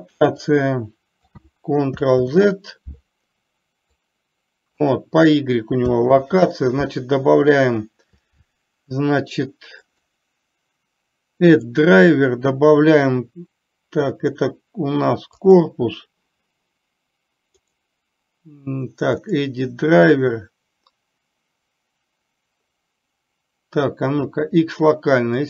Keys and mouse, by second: 0.8-1.8 drag, 2.6 ctrl+z, 4.3-5.3 drag, 6.6 ctrl+z.